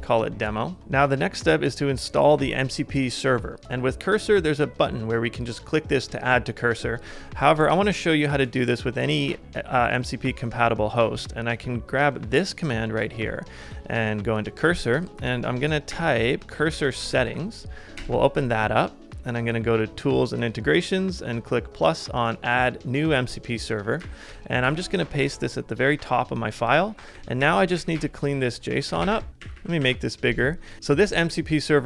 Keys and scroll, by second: 0.8 alt+super+Left, 0.8 alt+super+Right, 13.6 super+Tab, 15.9 shift+super+p, 16.3-17.8 typing, 17.9 Return, 24.0 typing, 25.2 super+v, 26.6 ctrl+c, 26.7-28.7 typing, 29.4 super+=, 29.6 super+=, 29.9 super+=.